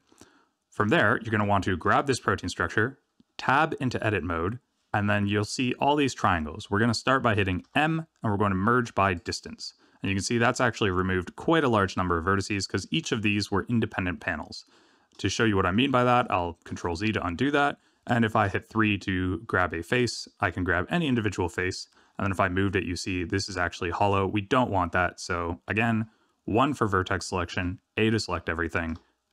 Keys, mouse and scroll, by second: 0.7 click, 1.3 shift+middle click, 2.0-2.6 scroll down 1, 3.4 Tab, 5.5-6.4 scroll up 3, 7.6 m, 16.0 ctrl+z, 16.6 ctrl+z, 17.4 Tab, 18.4 3, 19.9 click, 21.9 g, 25.2 1, 27.5 a, 28.8 m.